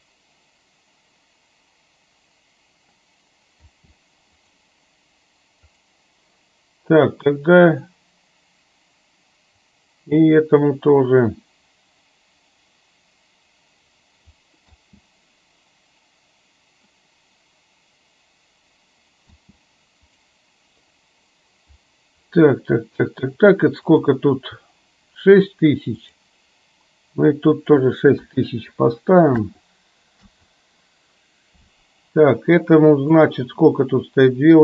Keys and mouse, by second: 3.7 space, 4.5 click, 5.7 click, 7.3-9.7 drag, 10.5-14.3 drag, 14.9 space, 19.4 space, 24.0 click, 26.1 click, 27.6-30.3 drag, 33.2 click.